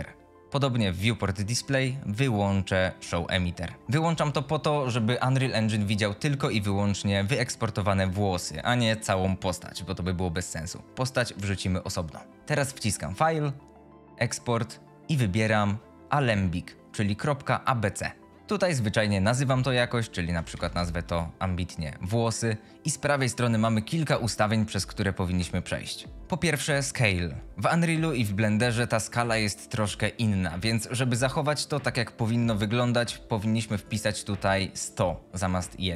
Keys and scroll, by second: 18.4 t, 19.9-21.2 typing, 26.1 F22.